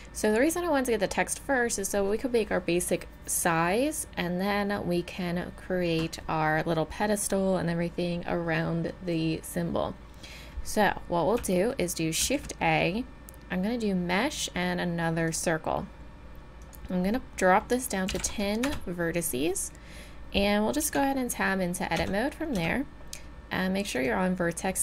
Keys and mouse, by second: 11.4 middle click, 12.2 shift+a, 13.2-14.5 drag, 16.6-18.5 drag, 20.8 Tab, 22.0 Tab, 22.5 Tab.